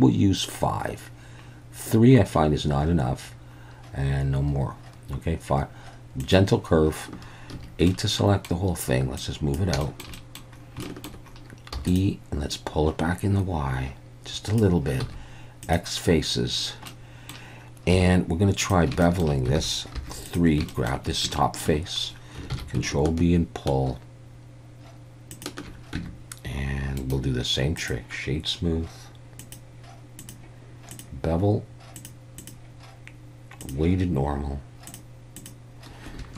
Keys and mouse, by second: 6.2 click, 7.5 a, 7.9 middle click, 9.2 click, 9.9 shift+middle click, 10.2 middle click, 10.9 shift+middle click, 11.8 e, 11.9 click, 12.5-14.6 drag, 15.0 x, 16.9 middle click, 17.9 2, 19.0 shift+middle click, 19.6 alt+a, 20.0 3, 20.3 click, 20.7 shift+middle click, 21.4 shift+middle click, 22.5 ctrl+b, 25.3 shift+click, 26.0 Tab, 27.1-27.9 right drag, 29.5 click, 30.2-31.0 drag, 32.0 click, 32.4-33.7 drag, 34.9 drag, 35.5-36.3 drag.